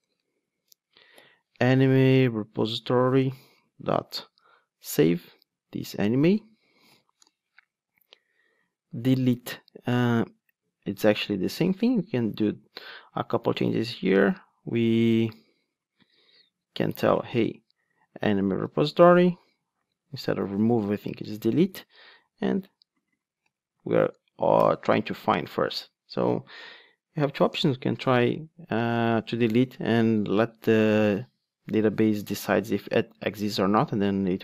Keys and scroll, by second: 0.8 Return, 6.8 alt+super+l, 18.3 Return, 19.9 alt+BackSpace, 21.0 Return.